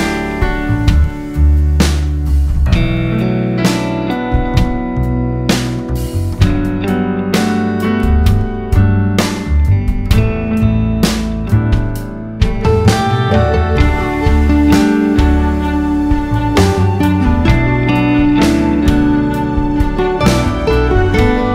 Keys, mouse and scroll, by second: 0.9-1.7 scroll down 2, 2.7 click, 7.3-16.4 drag, 16.9-17.9 drag, 20.4 click.